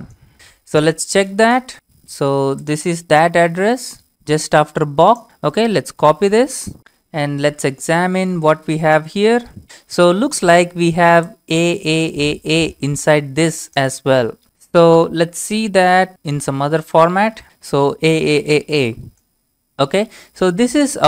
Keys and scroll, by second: 6.1 ctrl+c, 7.4-9.6 typing, 9.6 ctrl+v, 9.6 Return, 15.7-17.2 typing, 17.4 ctrl+v, 17.4 Return.